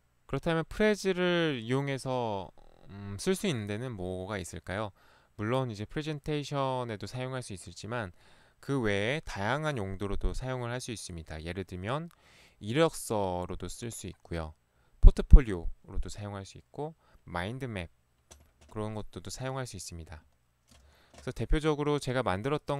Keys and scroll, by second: 20.9 ctrl+c.